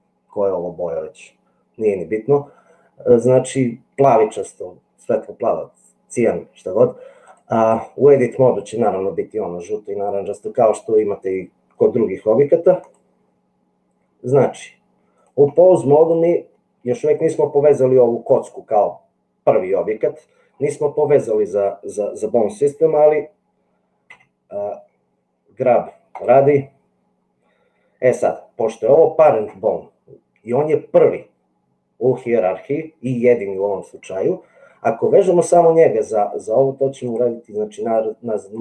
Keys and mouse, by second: 7.2-8.4 drag, 12.9-15.3 drag, 18.3 middle click, 19.7 middle click, 24.1 g, 37.2-38.6 drag.